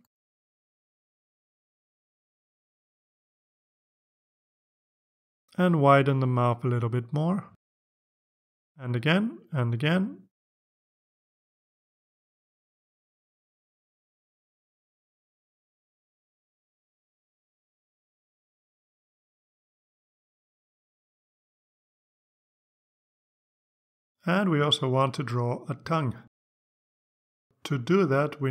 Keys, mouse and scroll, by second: 3.8 click, 6.3-7.6 drag, 8.2 right click, 9.8 click, 11.5-13.5 drag, 14.9 click, 15.9 click, 18.7 click, 19.6 click, 22.6 click, 25.6 click, 27.5 click.